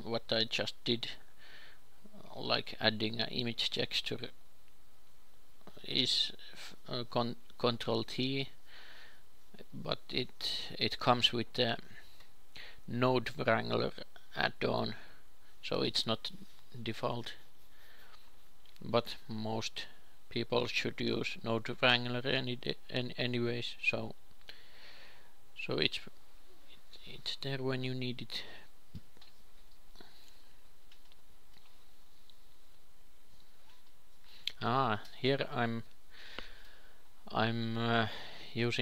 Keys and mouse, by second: 2.8 a, 3.1 b, 3.9 g, 5.1 shift+a, 22.2 ctrl+s, 31.1 shift+a, 38.0-38.8 drag.